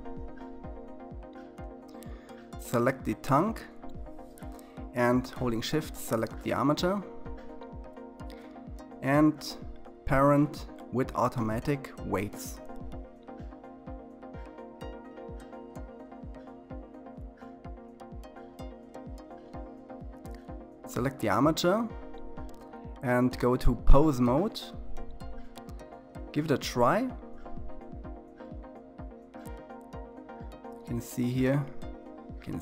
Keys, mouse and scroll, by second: 0.5-0.9 drag, 2.5 click, 4.8 shift+click, 15.3 click, 18.1 click, 21.5 click, 23.2-28.4 drag, 30.2 s.